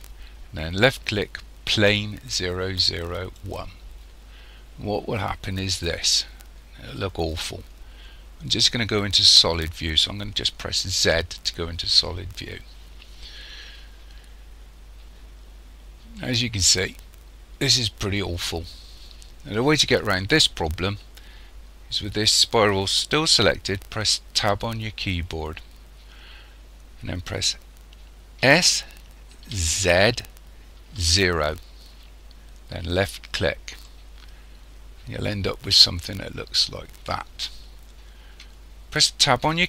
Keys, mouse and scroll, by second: 11.0 z, 13.4-14.2 scroll up 2, 14.6-16.2 scroll down 1, 16.2 middle click, 24.4 Tab, 28.4 s, 33.9 middle click, 39.4 Tab.